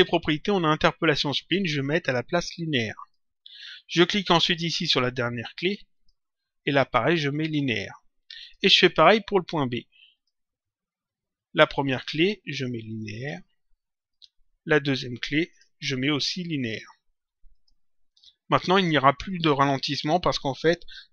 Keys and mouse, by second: 1.3 click, 3.2 click, 5.9 click, 7.3 click, 10.1 click, 11.7 click, 13.0 click, 15.4 click, 16.5 click, 18.7 click.